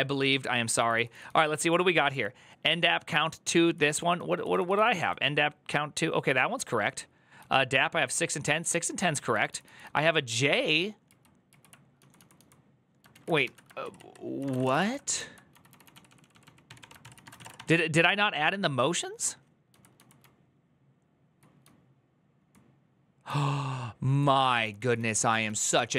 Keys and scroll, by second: 0.6 j, 1.1 j, 3.4-12.1 typing, 10.9 ctrl+u, 11.3 ctrl+u, 12.9 ctrl+a, 13.2-17.6 typing, 13.6 ctrl+c, 13.7 ctrl+c, 19.3-22.5 typing, 24.3-25.9 typing.